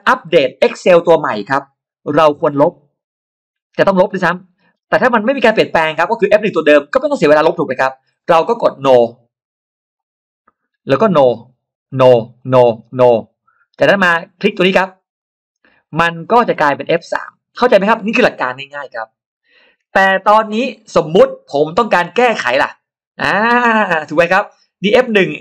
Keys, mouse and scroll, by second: 9.8 click, 11.1 click, 11.7 click, 12.2 click, 12.7 click, 14.1-14.5 scroll up 2, 15.0 click, 15.8 middle click, 16.1-17.1 scroll down 4, 16.6 middle click.